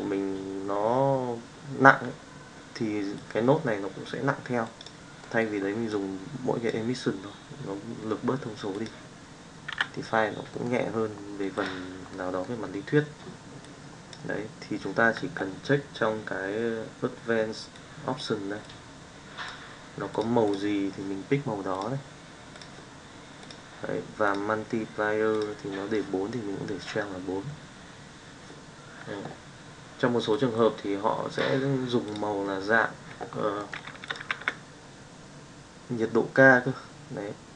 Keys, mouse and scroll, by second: 3.1-4.7 drag, 5.9 click, 8.7 click, 9.8 Delete, 10.4 middle click, 11.6 click, 12.1 middle click, 13.7 click, 34.1 shift+middle click, 34.3 shift+a.